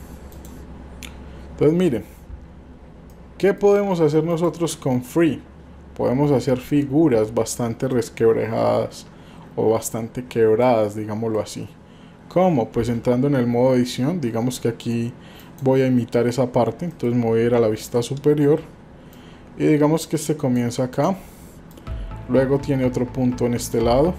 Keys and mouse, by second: 3.1 shift+middle click, 3.2 shift+click, 4.4 click, 8.0-9.9 middle drag, 10.8 middle click, 12.7 Tab, 15.4 click, 17.7 KP_7, 19.1-20.6 drag, 20.9 click, 21.7-23.8 drag.